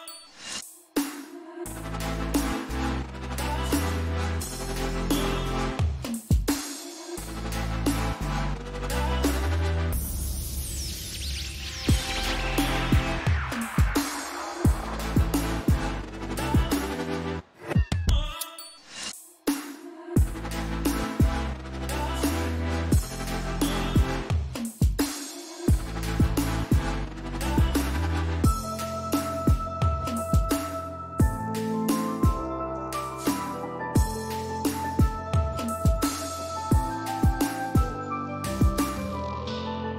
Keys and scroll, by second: 30.9 ctrl+t, 39.2 Left.